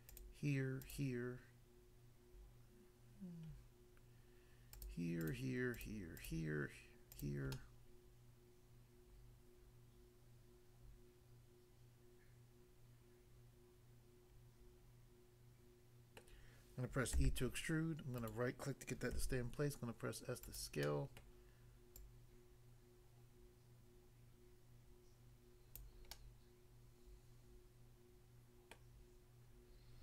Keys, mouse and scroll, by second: 0.8 shift+click, 0.9 shift+click, 4.8 shift+click, 5.2 shift+click, 5.7 shift+click, 6.1 shift+click, 7.1 shift+click, 7.6 middle click, 16.2 middle click, 17.2 e, 18.2 right click, 18.3 right click, 19.1 s, 20.4 click, 20.9 middle click, 21.3 middle click, 22.0 click, 25.7 click, 26.2 middle click, 28.7 middle click.